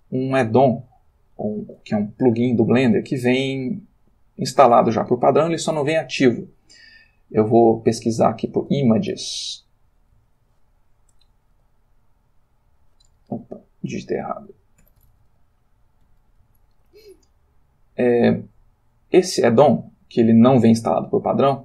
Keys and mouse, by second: 1.8 click, 4.5 click, 8.5-10.2 typing, 12.0 Return, 14.0 click, 14.8-16.5 typing, 18.3 click, 20.6-21.2 drag, 21.2-21.6 middle drag.